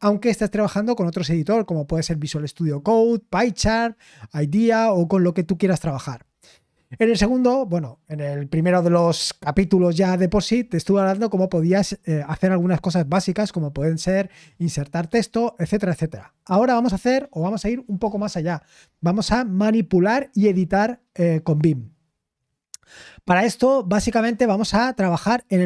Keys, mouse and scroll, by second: 23.0-24.0 scroll up 1, 24.0-25.6 scroll up 1.